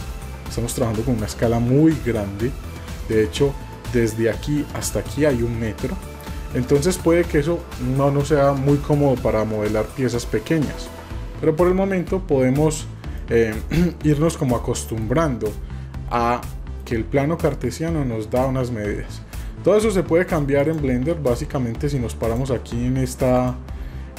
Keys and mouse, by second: 6.7-7.3 middle drag, 13.1-13.5 middle drag, 14.3 middle click, 14.7 middle click, 15.2 shift+middle drag, 16.2-16.8 middle drag, 20.6 click, 23.3 click.